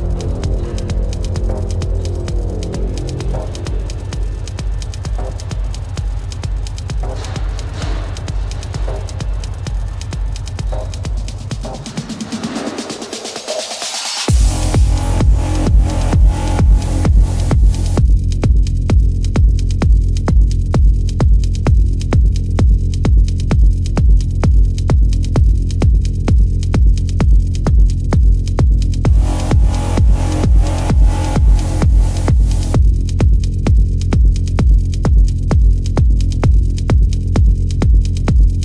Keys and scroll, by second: 10.9 space, 22.8 ctrl+=, 23.4 ctrl+=, 23.6 space, 23.9 space, 24.4 ctrl+-, 26.1-31.0 typing, 29.1 ctrl+alt+z, 34.9 ctrl+alt+z, 35.7 space, 38.3 space.